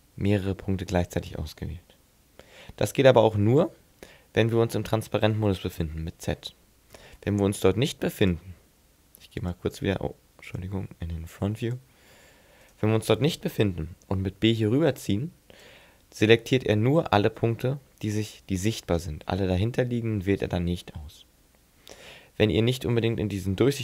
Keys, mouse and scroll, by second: 0.9 middle click, 7.1 z, 8.2 click, 10.5 click, 11.7 click, 12.7 right click, 13.9 b, 19.1 middle click, 23.5 z.